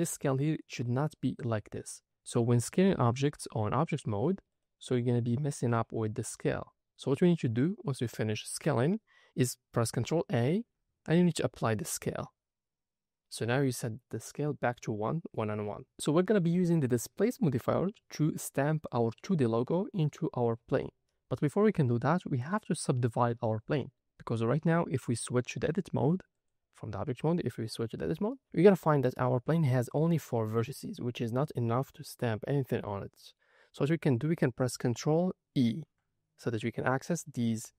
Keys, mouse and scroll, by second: 3.1 s, 4.4 right click, 10.3 ctrl+a, 17.6-19.0 drag, 19.0 middle click, 19.7-20.8 drag, 21.1-22.2 middle drag, 24.8-25.2 shift+middle drag, 26.3-27.7 drag, 28.2 middle click, 32.9 middle click, 35.5 ctrl+e.